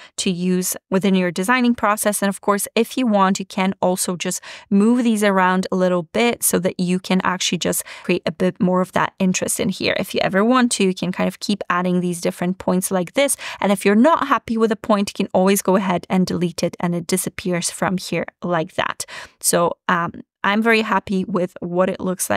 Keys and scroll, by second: 10.5 super+c, 12.6 super+v.